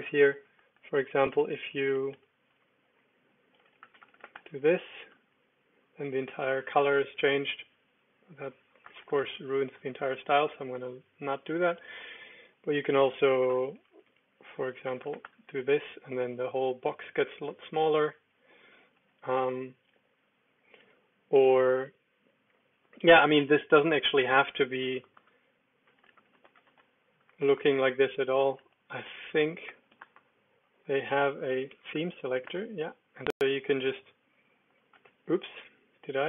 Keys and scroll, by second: 0.5-4.5 typing, 5.1 super+d, 7.2 Escape, 7.6-9.5 typing, 11.9-15.7 typing, 17.6 Escape, 17.8 alt+space, 19.0 Escape, 19.9 u, 24.6-27.2 typing, 27.5 Return, 29.4-32.2 typing, 32.4 Return, 34.1 Up, 34.5 Down, 35.0 Escape.